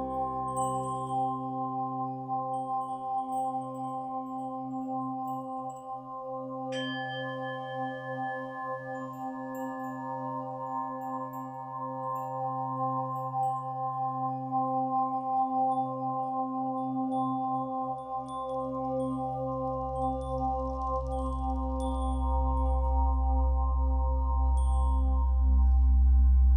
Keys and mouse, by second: 1.4 alt+r, 1.8 alt+g, 4.0-5.0 drag, 5.0 g, 5.3 x, 6.4-8.6 alt+drag, 8.0 g, 8.6 g, 9.0 x, 10.2 click, 11.2 click, 12.0 1, 15.7 g, 16.1 z, 17.3 click, 18.7 click, 19.6 g, 21.7 click, 22.5 click, 22.6 typing, 24.3 click.